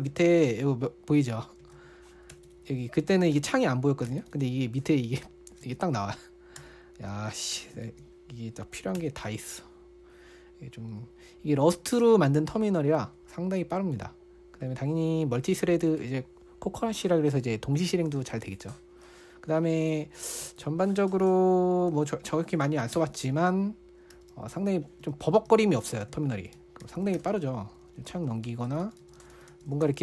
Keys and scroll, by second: 0.3-7.0 typing, 8.3 ctrl+f, 9.4 super+BackSpace, 20.8 super+1, 22.0-22.3 typing, 23.0 Tab, 23.4 Return, 24.3-25.2 typing, 25.5 ctrl+d, 25.9 ctrl+d, 26.0 ctrl+d, 26.7 ctrl+d, 26.8 ctrl+d, 27.0 ctrl+d, 27.6 ctrl+u, 27.7 ctrl+u, 27.8 ctrl+u, 28.9 ctrl+d, 29.1 ctrl+d, 29.2 ctrl+d.